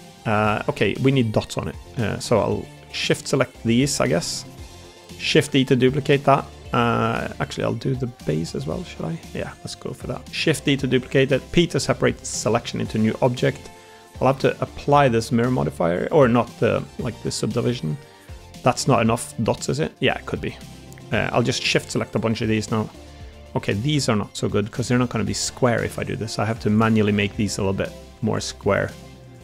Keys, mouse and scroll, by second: 0.2 Tab, 0.5 Tab, 0.8 middle click, 1.3 middle click, 2.0 shift+click, 2.8 middle click, 3.6 middle click, 4.4 middle click, 4.8 middle click, 5.3 shift+d, 5.8 middle click, 7.1 ctrl+z, 8.2 middle click, 9.7 middle click, 10.2 shift+d, 11.2 p, 12.5 Tab, 16.7 ctrl+a, 17.1 Tab, 17.6-19.8 middle drag, 20.3 middle click, 21.3 shift+middle click, 22.2 middle click, 22.8 middle click, 23.4 middle click, 24.4 ctrl+r, 24.9 click, 25.5 ctrl+r, 26.0 click, 26.4 ctrl+r, 27.2 ctrl+r, 27.6 middle click, 28.0 ctrl+r, 28.5 middle click.